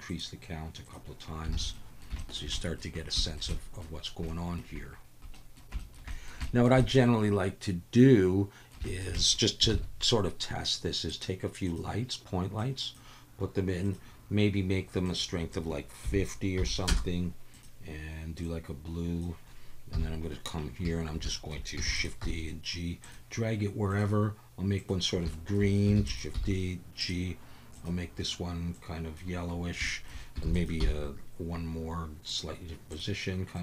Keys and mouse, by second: 0.1 click, 0.8 click, 1.7 alt+a, 1.7 drag, 2.2 shift+drag, 2.6 click, 3.2 shift+click, 3.5 click, 4.3-4.6 shift+drag, 5.3 click, 5.8 shift+drag, 6.1 click, 6.4 shift+drag, 6.8-8.7 middle drag, 8.9 shift+middle click, 9.1 middle click, 9.7 shift+a, 12.6 click, 13.8 click, 15.0-16.9 drag, 17.5 click, 19.9 KP_7, 21.3 shift+middle click, 21.9 shift+d, 22.0 click, 22.2 g, 23.9 click, 25.3 shift+middle drag, 26.0 shift+d, 26.1 click, 26.3 g, 27.0-27.8 drag, 29.9 shift+click, 30.4 shift+d, 30.8 g, 32.3-33.5 drag.